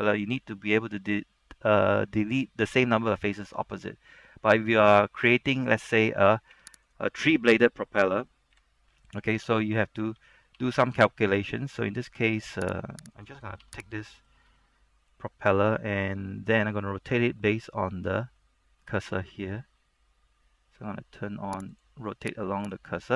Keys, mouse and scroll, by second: 6.7 Tab, 7.0 right click, 8.7-10.3 typing, 10.7 Tab, 12.8 right click, 13.7 Tab, 14.1 right click, 14.4 scroll down 1, 14.7 shift+middle click, 21.8 click.